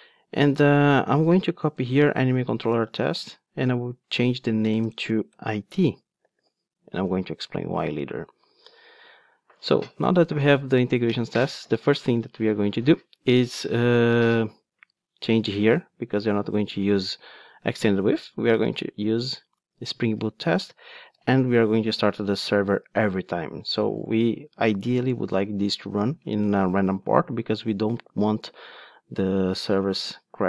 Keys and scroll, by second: 1.7 super+c, 20.2 Return, 25.1 Return.